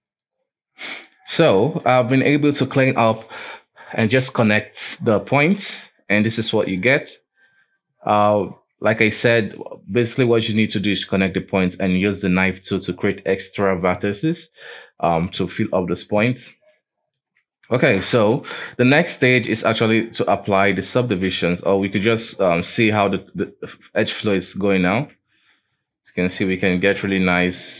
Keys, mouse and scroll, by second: 0.3 ctrl+s, 1.0 click, 1.6-4.8 shift+middle drag, 6.0-7.0 scroll up 3, 7.0-7.6 scroll down 2, 7.6-8.1 scroll up 2, 9.1 right click, 16.8-18.2 shift+middle drag, 18.2-19.1 scroll down 4, 19.1-21.2 scroll up 1, 21.2-21.5 scroll up 3, 21.5 Tab, 22.0 alt+a, 22.7 ctrl+r, 24.9 ctrl+r, 26.9 ctrl+r.